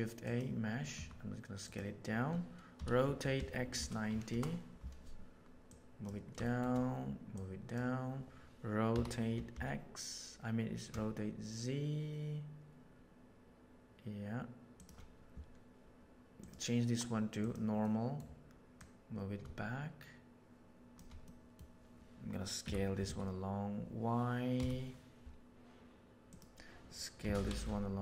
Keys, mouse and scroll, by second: 0.9 s, 2.7 r, 5.7 right click, 6.4 shift+middle drag, 7.3 right click, 7.6 click, 8.9 r, 16.4-17.7 right drag, 17.7 middle click, 18.8 click, 21.2-21.5 middle drag, 22.6 s, 27.2 s.